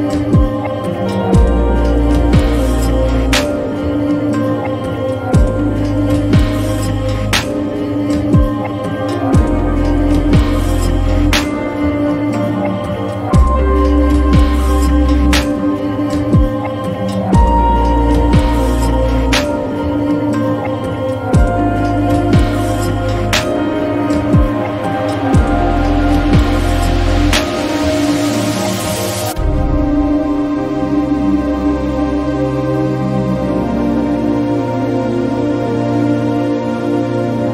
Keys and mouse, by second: 3.9 click, 6.7-7.8 drag, 11.0 click, 11.3 Delete, 15.0 click, 16.3 click, 25.6-26.9 drag, 29.3 click, 34.9 click.